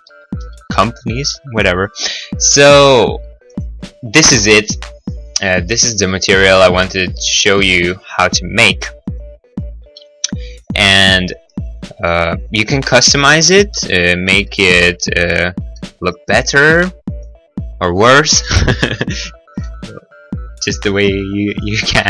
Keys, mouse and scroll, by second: 0.1 middle click, 0.4 b, 0.7 click, 1.1 click, 1.3 g, 2.0 click, 2.2 click, 2.4 middle click, 2.8 middle click, 2.9-3.3 scroll, 3.4 right click, 3.6 right click, 3.8-4.6 scroll, 4.6 middle click, 4.6 scroll, 5.2 middle click, 6.4 right click, 6.6 right click, 7.8 middle click, 8.3 middle click, 9.0 right click, 9.1 right click, 9.4 right click, 9.6 right click, 9.8 b, 9.9 click, 10.7 click, 10.8 g, 11.0 x, 12.0 scroll, 12.1 middle click, 12.3 middle click, 12.7-13.4 scroll, 13.5 right click, 13.6 right click, 13.7 x, 14.1 click, 14.6 middle click, 16.5 middle click, 17.2 right click, 18.0 g, 18.8 click, 19.2 click, 20.0 middle click, 20.2 middle click, 20.8 right click, 21.6 right click, 21.9 right click.